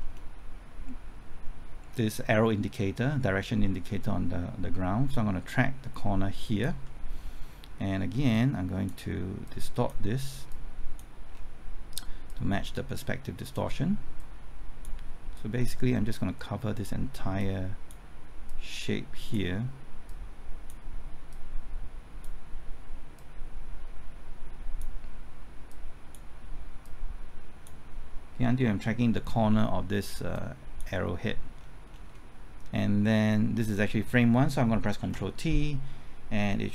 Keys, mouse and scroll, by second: 5.0 typing, 6.4 ctrl+click, 8.3 click, 11.3-12.2 scroll down 1, 12.2-28.0 drag, 31.5-34.3 scroll down 1, 34.3 typing, 35.0 ctrl+t.